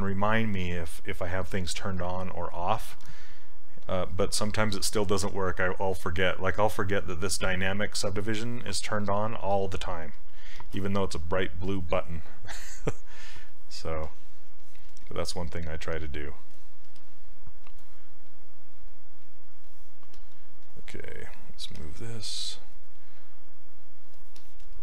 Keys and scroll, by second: 16.9 s, 22.5 s.